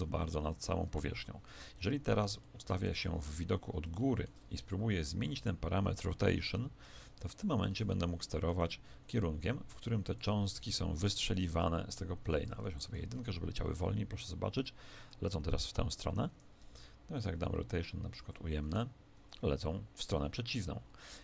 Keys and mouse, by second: 0.5 Escape, 1.5 KP_7, 2.4-5.9 middle drag, 6.6 click, 7.7 alt+a, 8.5 Escape, 9.6 click, 10.4 alt+a, 11.2 Escape, 12.3 click, 13.1 alt+a, 16.2 Escape, 17.1 click, 18.6 alt+a.